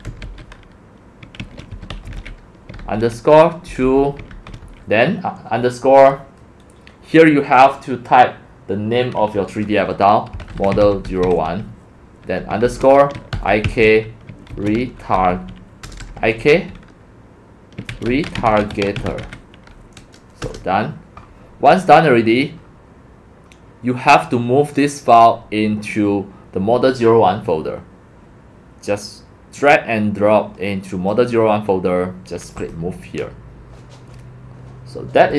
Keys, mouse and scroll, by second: 0.0-4.7 typing, 10.1-11.7 typing, 12.9-16.4 typing, 17.6-19.7 typing, 20.4 Return, 21.8-22.8 scroll, 25.1-25.5 drag, 25.9-27.8 drag, 29.0-30.3 drag, 31.1 click, 32.6 click, 34.2 drag.